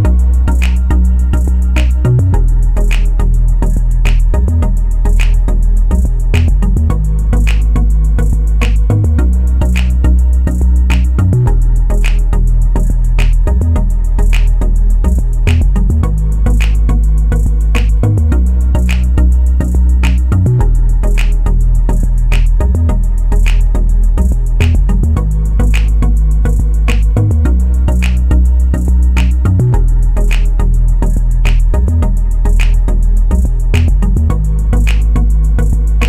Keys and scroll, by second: 24.9-25.9 typing.